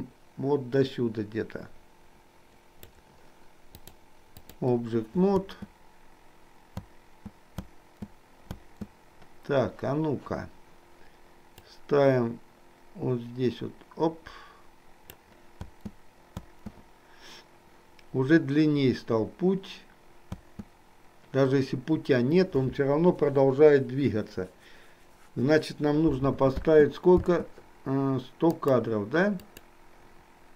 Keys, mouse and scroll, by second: 3.8-4.8 drag, 5.4 space, 11.7-15.2 drag, 15.7 space, 20.3 space, 26.5 space, 28.5 click, 29.5 click.